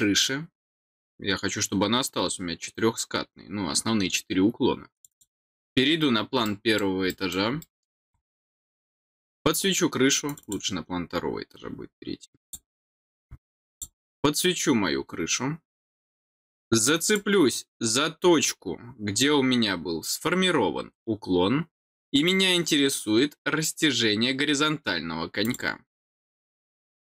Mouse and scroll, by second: 4.9 click, 6.4 middle click, 7.0 middle click, 7.5 middle click, 10.2 click, 12.4 click, 13.7 click, 17.0 click.